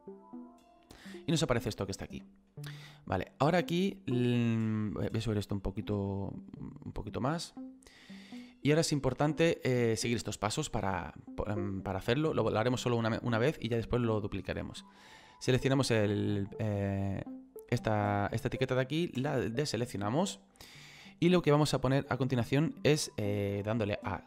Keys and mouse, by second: 0.1 click, 1.4 middle click, 5.6 click, 15.1 click, 17.4 click, 18.4 click.